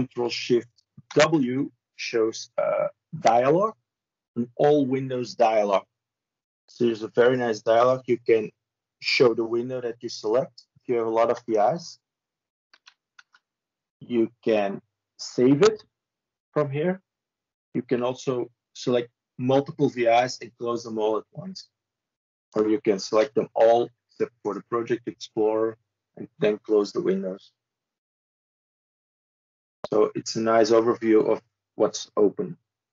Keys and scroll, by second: 0.9 ctrl+shift+w, 13.0 ctrl+shift+w, 22.9 ctrl+a.